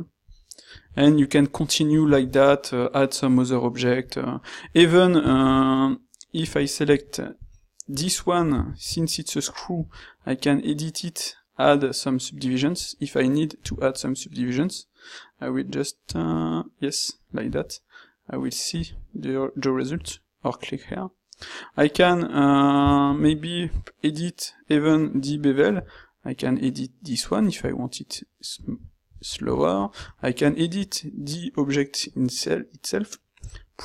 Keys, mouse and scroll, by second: 5.3 ctrl+shift+q, 8.8 ctrl+shift+q, 23.0 ctrl+shift+q, 33.5 g.